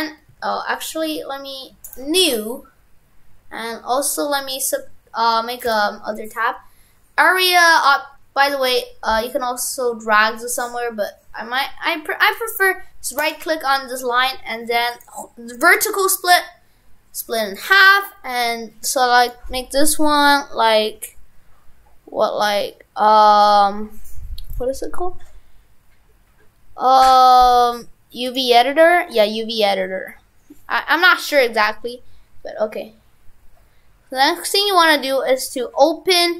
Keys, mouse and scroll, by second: 0.3 Tab, 1.9 click, 5.6 right click, 13.3 right click, 19.2 click, 29.1-31.3 scroll up 2, 35.4 click.